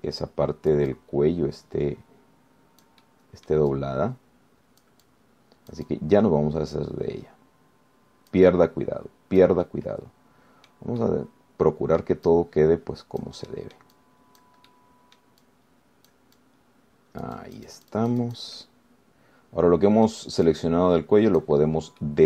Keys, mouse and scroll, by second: 0.2 click, 1.0-4.9 drag, 5.4-10.8 drag, 10.8-12.1 middle drag, 12.2 middle click, 12.3 scroll down 1, 13.5-14.6 drag, 14.7 middle click, 15.0 scroll up 1, 15.2 click, 15.9 middle click, 17.6-19.8 drag, 19.8-21.5 middle drag, 21.7-22.2 drag.